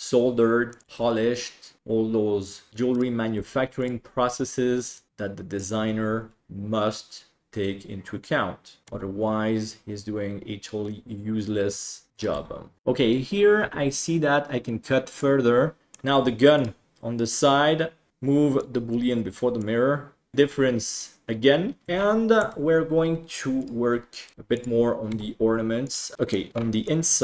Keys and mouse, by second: 1.0 g, 2.9 right click, 3.4 g, 5.1 click, 8.9 e, 12.3 g, 15.1 click, 15.8 ctrl+s, 15.8 middle drag, 16.6 right click, 18.6-19.6 drag, 22.4 Tab, 24.3 right click, 24.3 shift+d, 25.1 e, 26.1 middle drag, 26.8-27.2 middle drag.